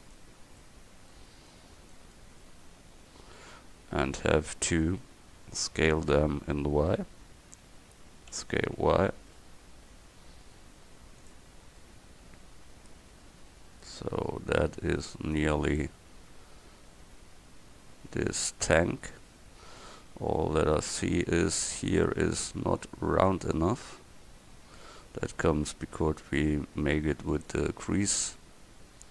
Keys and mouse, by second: 0.7 middle click, 2.4-3.7 middle drag, 8.4 s, 11.5 Tab, 21.6 middle click, 22.3 Tab, 27.7 Tab.